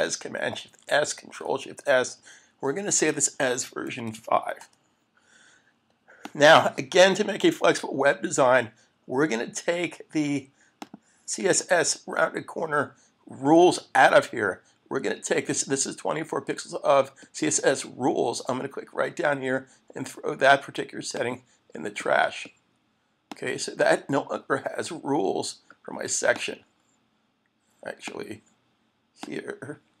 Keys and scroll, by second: 0.7 shift+super+s, 2.2 Right, 4.6 Return.